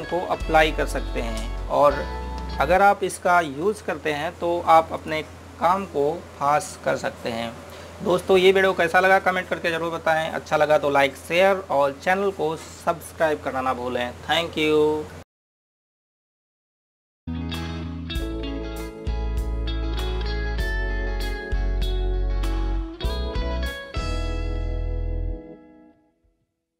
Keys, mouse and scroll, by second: 6.0 click.